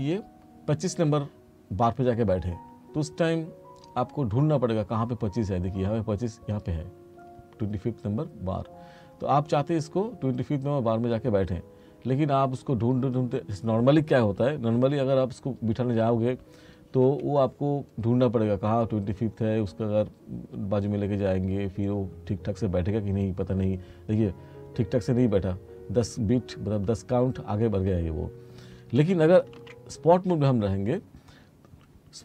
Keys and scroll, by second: 17.1 F2, 29.6 ctrl+z.